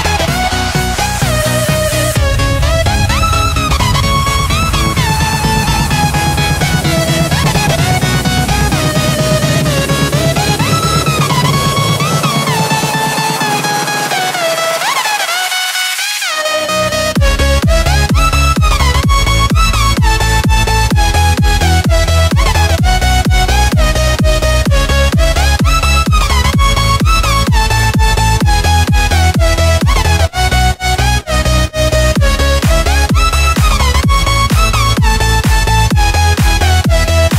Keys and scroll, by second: 0.4-1.3 space, 2.1 p, 5.7 v, 6.3 a, 9.1 x, 13.6 space, 14.1 super+space, 14.3 super+space, 17.9 w, 20.6 space, 21.4 super+space, 22.0 super+space, 22.1 super+space, 22.2 super+space, 22.3 super+space, 22.4 super+space, 22.7 super+space, 26.4 space, 28.7 super+space, 28.8-29.2 super+space, 29.9 v, 30.9 space, 31.4 space.